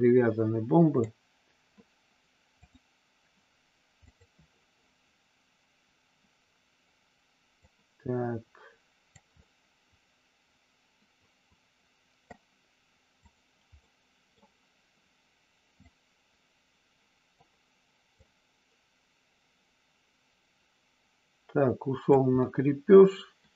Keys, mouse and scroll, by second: 2.6 click, 4.0 click, 7.6-9.1 drag, 9.3-12.3 middle drag, 12.3 scroll down 1, 13.3 click, 13.7 middle click, 15.7-17.4 drag, 18.1-22.0 drag, 22.4 scroll up 1, 22.5-23.5 middle drag.